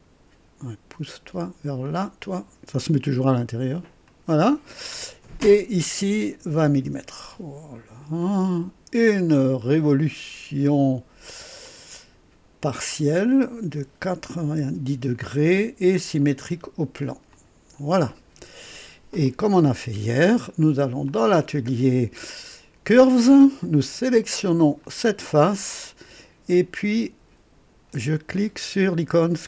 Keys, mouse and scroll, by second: 1.8 click, 4.0 click, 5.4 click, 6.5 KP_2, 6.6 KP_0, 6.8 Return, 8.2 click, 9.4 scroll down 1, 9.9 right click, 11.6 click, 11.9 typing, 13.1 click, 14.3 typing, 16.2 click, 17.3 click, 18.5 scroll down 1, 19.2-20.6 drag, 21.2-23.4 drag, 21.2 typing, 24.8 click.